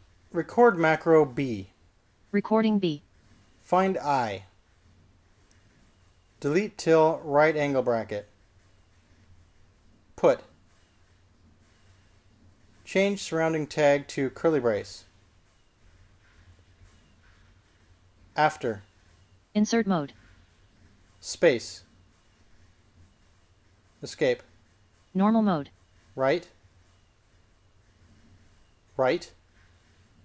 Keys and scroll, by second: 2.1-2.9 typing, 5.1-5.8 typing, 8.7-9.5 typing, 11.2 p, 15.9 typing, 19.6 a, 22.8 space, 25.2 Escape, 30.0 l.